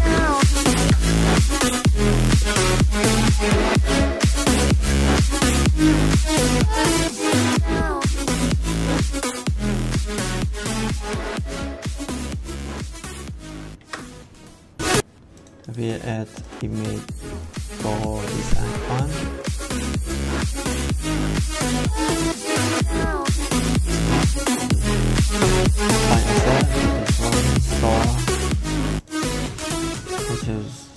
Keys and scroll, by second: 0.0-0.4 typing, 0.7 ctrl+s, 13.7 ctrl+s.